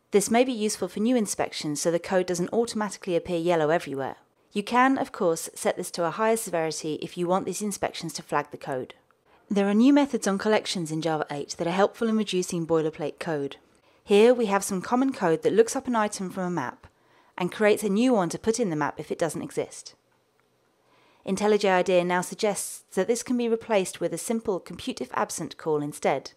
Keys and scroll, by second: 20.0 alt+Return.